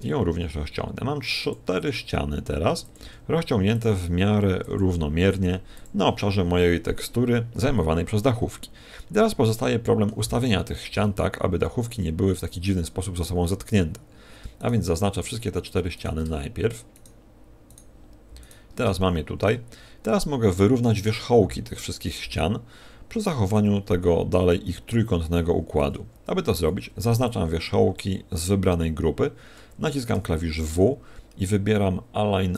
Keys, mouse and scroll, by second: 0.4 ctrl+click, 0.4 g, 1.8 s, 3.0 click, 3.0 g, 4.0 s, 4.6 g, 9.4 shift+middle click, 10.3-10.8 scroll up 5, 14.6 right click, 15.4-16.0 scroll down 5, 16.0 right click, 17.0 shift+right click, 17.7 shift+right click, 18.4 shift+right click, 26.6 a, 28.0 b.